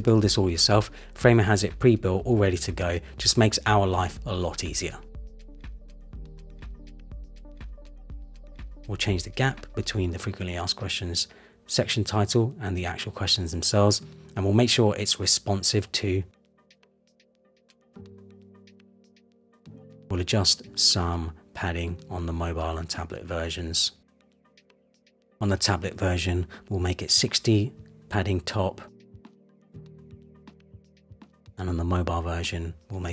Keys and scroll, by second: 12.2 shift+Down, 14.4 shift+Up, 17.0 super+-, 18.6 super+=, 22.3 super+-, 28.0 shift+Down, 29.6 shift+Up, 32.7 shift+Down.